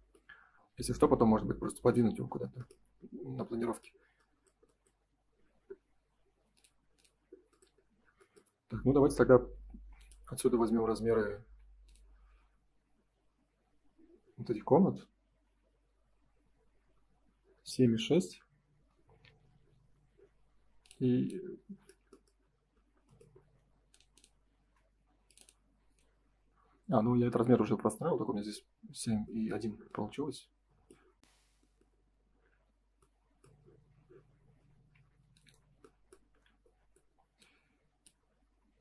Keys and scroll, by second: 11.3 Escape, 18.0 Escape, 18.7 space, 24.6 Escape, 34.9 Escape, 36.2 F3.